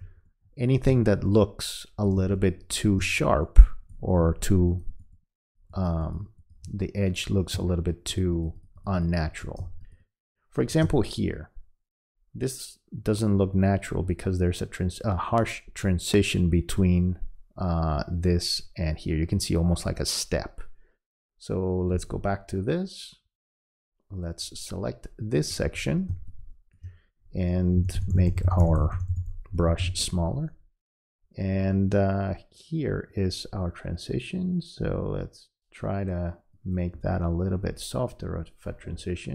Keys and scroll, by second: 0.0 space, 2.2 space, 4.2 space, 10.6 space, 27.8 [.